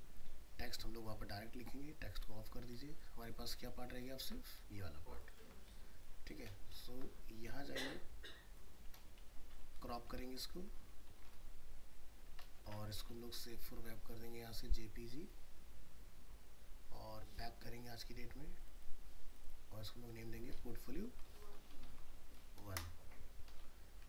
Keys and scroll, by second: 3.5 ctrl+space, 3.7 ctrl+-, 4.7 ctrl+space, 9.2 alt+i, 9.8 ctrl+d, 11.1 alt+i, 11.2 alt+r, 12.1 ctrl+d, 12.6 ctrl+alt+shift+s, 23.5 ctrl+z.